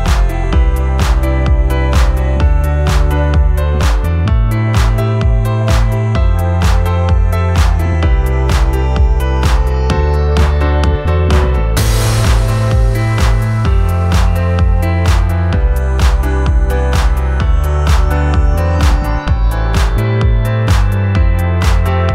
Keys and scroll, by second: 3.0 1, 4.3 F1, 4.9 ctrl+d, 7.6 shift+s, 7.7 shift+h, 7.8 shift+l, 8.0 shift+d, 8.1 Return, 9.1 F4, 9.7 F3, 13.6 shift+a, 13.8 shift+m, 13.9 Return, 15.5-16.0 typing, 16.1 Return, 17.3 F1, 21.2 F3.